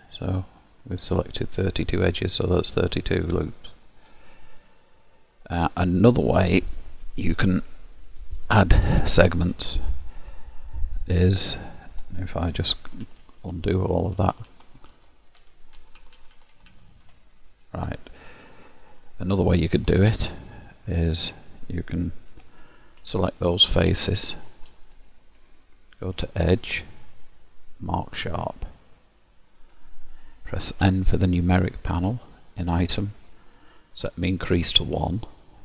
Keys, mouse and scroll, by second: 2.3 middle click, 4.7-5.3 scroll up 1, 5.3-5.9 scroll down 3, 5.9 scroll down 2, 11.5 middle click, 12.9 ctrl+z, 13.1-14.5 ctrl+z, 15.0 ctrl+z, 15.5 ctrl+z, 15.8 ctrl+z, 16.1 ctrl+z, 16.2 ctrl+z, 16.4 ctrl+z, 16.6 ctrl+z, 16.9 ctrl+z, 17.1 ctrl+z, 18.3 middle click, 22.4 3, 22.5 click, 23.2 middle click, 24.3 shift+click, 26.6 click, 30.8 n, 32.3 click.